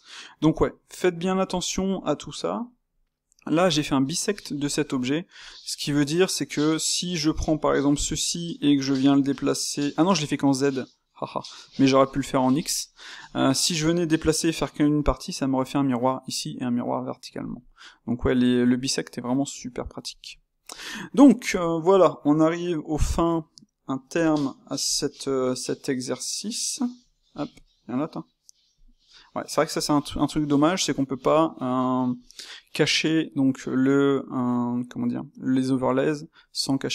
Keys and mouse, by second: 6.6 click, 7.5-8.1 middle drag, 8.1 g, 11.4-21.5 middle drag, 21.5-22.2 drag, 22.2-24.0 middle drag, 24.0 n, 25.3 KP_0, 26.1-26.9 middle drag, 26.9 KP_0, 27.2 KP_0, 28.7 click, 29.9-36.9 shift+middle drag.